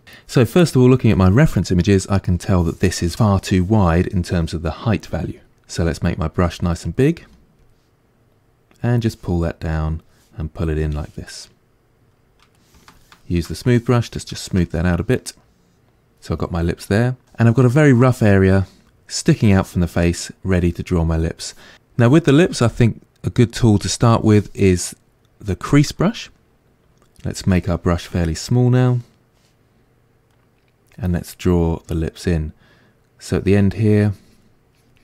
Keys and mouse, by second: 0.0-6.9 middle drag, 6.9-11.3 drag, 7.2 f, 11.3-12.9 middle drag, 12.9-14.7 shift+drag, 14.7-24.1 middle drag, 24.1-27.4 drag, 27.4 f, 30.4-33.3 middle drag, 33.3-35.0 drag.